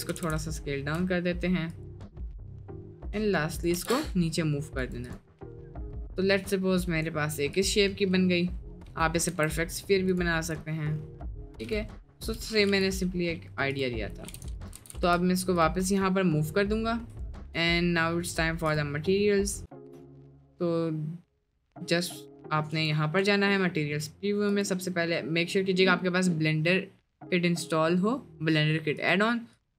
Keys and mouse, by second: 0.2 s, 3.8 g, 5.4 click, 6.2-7.0 middle drag, 7.6 click, 8.8 Tab, 9.3 Tab, 9.8 middle click, 10.4-10.9 middle drag, 11.7 click, 12.2 Delete, 12.8-14.3 drag, 14.3 g, 14.8 g, 15.9-16.3 middle drag, 16.6 middle drag, 17.3 shift+middle drag, 17.6 middle drag, 18.1-18.5 middle drag, 19.0-19.7 middle drag, 19.8 middle click, 21.5 click, 22.8-23.6 drag, 23.7 middle click.